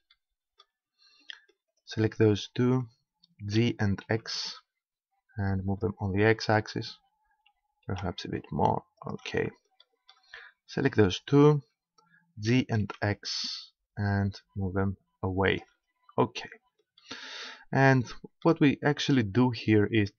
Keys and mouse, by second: 0.1-1.1 middle drag, 1.3-3.5 right drag, 3.6 g, 5.9-7.6 drag, 7.5 g, 9.1 click, 10.7-13.1 drag, 12.5 g, 13.1-15.6 middle drag, 15.6 click, 18.9-20.1 middle drag.